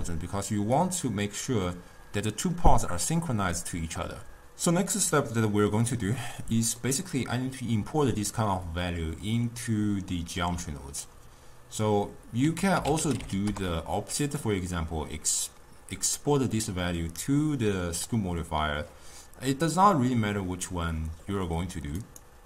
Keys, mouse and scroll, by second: 0.0-1.6 typing, 0.1 click, 0.9 click, 6.2-9.2 middle drag, 12.5 ctrl+a, 22.0-22.4 right drag.